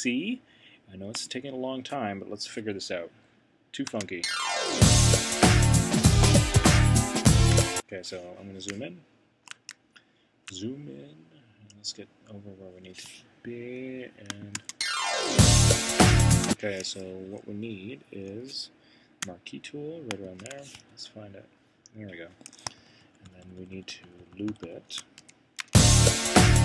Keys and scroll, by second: 20.7 Right, 22.8 shift+Right, 25.2 c.